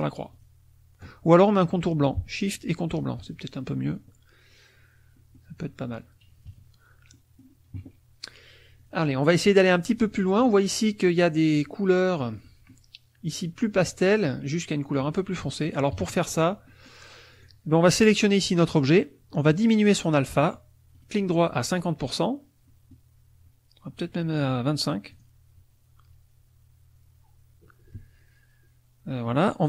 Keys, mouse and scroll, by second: 0.3 shift+click, 2.4 shift+click, 3.2 shift+click, 3.6 shift+click, 5.1 click, 6.5 KP_Subtract, 8.8 click, 9.8 click, 10.2 click, 12.4 click, 15.9 KP_Subtract, 16.7 middle click, 17.3 click, 20.9 right click, 21.7 click, 22.7-24.2 middle drag, 24.2 right click, 25.1 click.